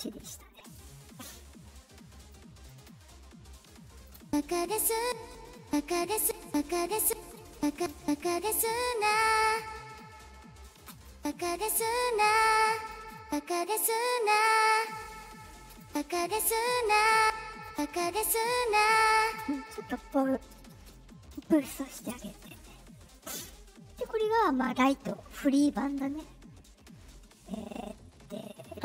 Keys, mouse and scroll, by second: 0.6 click, 2.2 click, 2.7 click, 3.6 click, 4.1-7.9 typing, 5.3 click, 6.6 click, 8.3-9.5 drag, 9.9 click, 10.7 space, 11.0 space, 11.5-12.8 drag, 12.9 space, 13.1 space, 13.6 click, 14.3-15.7 drag, 15.5 space, 15.8 space, 17.1 click, 17.1 space, 17.6 space, 19.1 click, 19.2 space, 20.8-21.3 drag, 21.9 click, 22.3 click, 23.1 click, 28.6 click.